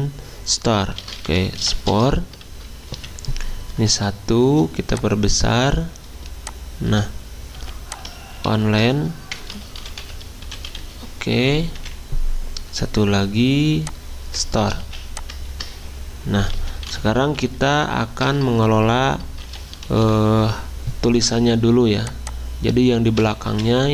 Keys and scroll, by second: 0.8-2.5 typing, 3.0 Escape, 4.0 typing, 7.6-11.3 typing, 11.8 Escape, 12.7-20.6 typing, 23.5 Escape.